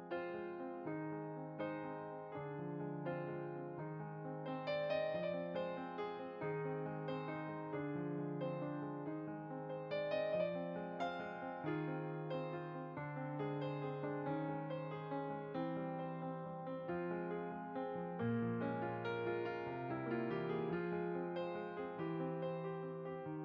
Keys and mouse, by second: 2.2 shift+click, 2.4 shift+d, 3.8 click, 4.9 shift+d, 5.6 click, 6.2 r, 6.9 click, 7.2 middle click, 8.8 g, 9.7 click, 10.2 middle click, 11.3 g, 12.5 click, 12.8 middle click, 13.5 click, 13.7 middle click, 14.4 g, 15.7 click, 16.7 middle click, 18.3 shift+d, 18.8 click, 19.7 r, 20.9 g, 21.5 click, 21.8 middle click.